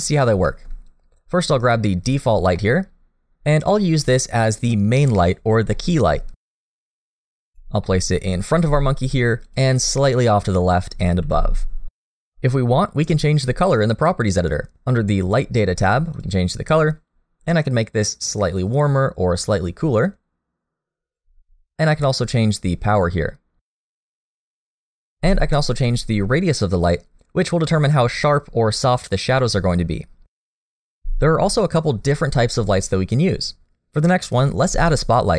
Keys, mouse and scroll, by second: 0.5 shift+middle click, 2.0 click, 2.5 middle click, 5.7 middle click, 6.5 g, 7.6 middle click, 8.0 g, 8.8 middle click, 9.8 g, 11.2 middle click, 12.2 g, 12.8 middle click, 16.1 click, 22.5 click, 27.3 click, 29.3 click, 30.2 click.